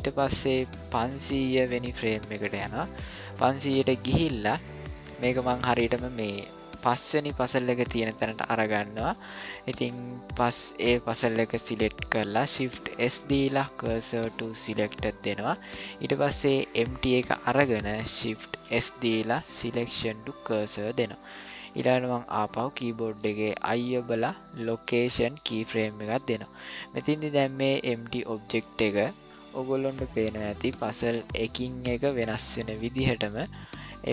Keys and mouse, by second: 1.0 click, 7.9 middle click, 10.3 click, 12.9 shift+s, 18.6 shift+s, 23.1 i, 26.9-34.1 drag.